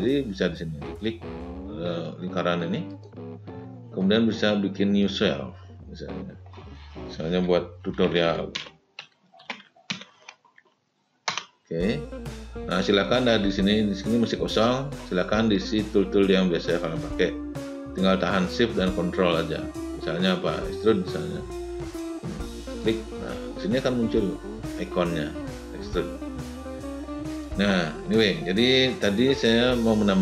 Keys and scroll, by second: 7.7 t, 7.8 u.